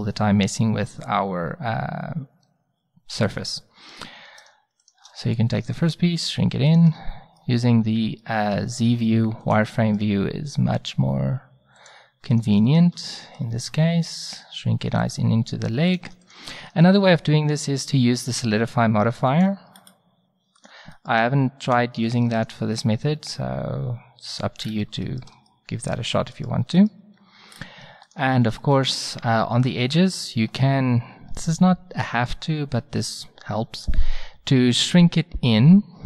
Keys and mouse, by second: 5.7 s, 6.9 z, 8.9 s, 10.2 s, 11.7-15.0 drag, 13.6 s, 15.9-18.0 drag, 16.7 s, 19.8-21.1 drag, 21.1-23.5 middle drag, 23.1 s, 23.5 click, 24.3 middle click, 24.6 click, 30.6-36.0 middle drag.